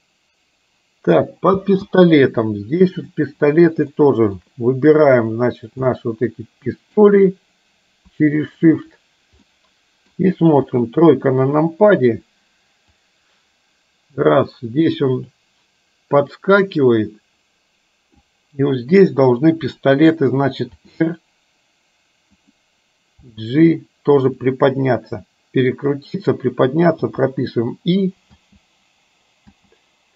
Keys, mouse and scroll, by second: 1.6 space, 3.0 click, 4.0 middle click, 5.1 click, 5.9-7.0 middle drag, 8.6 shift+click, 9.5 middle click, 10.8 KP_3, 13.0-18.3 drag, 20.8 r, 23.4 g, 27.0 i, 28.4 space, 29.5 space.